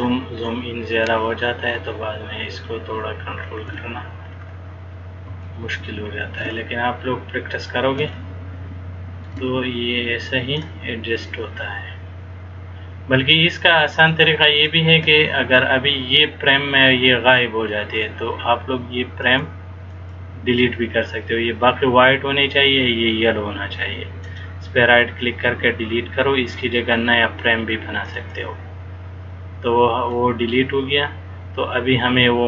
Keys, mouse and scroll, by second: 3.5-4.0 shift+scroll down 5, 3.9 scroll up 1, 4.4-5.0 scroll down 5, 5.0-5.4 scroll up 1, 5.6 shift+middle click, 6.6-7.6 scroll down 4, 8.2 shift+middle click, 10.8 click, 19.4 click, 20.0 click, 24.4 right click, 30.3 click.